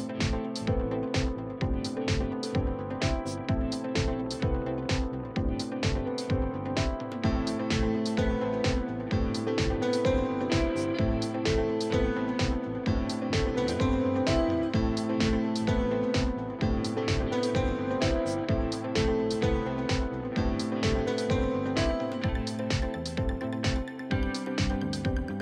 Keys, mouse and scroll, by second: 0.9 scroll up 3, 1.3-3.3 scroll down 1, 14.4-16.1 drag, 16.1-16.9 scroll up 2, 16.9 KP_3, 18.3-19.3 middle drag, 19.3 click, 19.7 scroll down 1, 19.9-20.5 scroll up 1, 20.5-22.0 scroll up 1, 22.0 ctrl+z, 23.3 click, 23.6 scroll down 1, 23.8-24.1 scroll up 1, 24.1 click, 24.3-24.7 scroll up 2, 24.7 a.